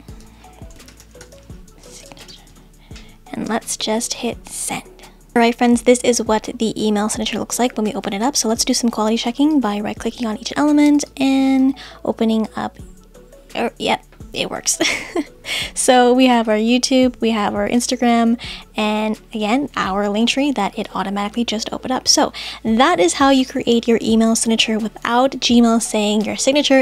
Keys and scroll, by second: 0.9 shift+t.